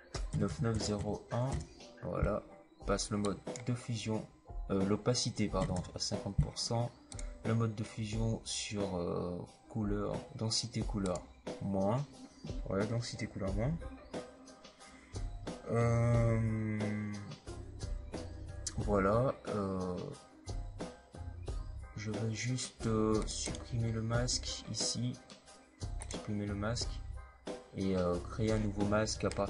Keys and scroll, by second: 0.2-0.9 typing, 5.5 KP_5, 5.6 KP_0.